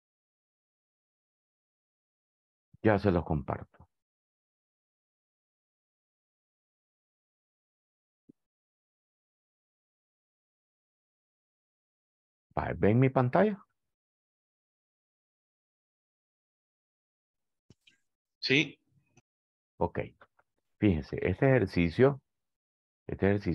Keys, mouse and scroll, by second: 14.3-18.8 drag, 23.0 click.